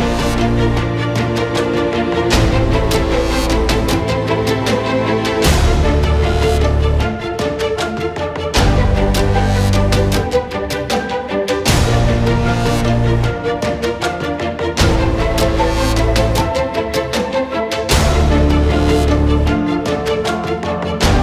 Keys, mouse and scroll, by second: 0.7 click, 0.8 c, 1.9 click, 2.0-2.3 scroll down 1, 2.3 middle click, 2.9-3.5 drag, 3.5 scroll down 3, 3.6 middle click, 3.7 shift+a, 4.6 alt+g, 5.3 alt+click, 5.4 s, 5.9-7.6 alt+drag, 6.6 t, 7.6 middle click, 7.6 shift+a, 8.4 middle click, 8.5 ctrl+z, 8.6 shift+a, 9.1-9.7 alt+drag, 9.7 alt+middle click, 10.0 s, 10.6 scroll up 2, 10.7 ctrl+a, 11.0 alt+middle click, 11.1 scroll down 3, 11.2-13.4 drag, 13.4-14.0 scroll down 11, 14.0-15.7 drag, 16.1-16.6 scroll down 13, 16.6 click, 17.4-18.1 scroll down 1, 18.1-19.3 drag, 19.3-19.7 scroll down 4, 19.7 click, 20.4 scroll up 2, 20.6 scroll down 3, 20.9-21.2 scroll up 1.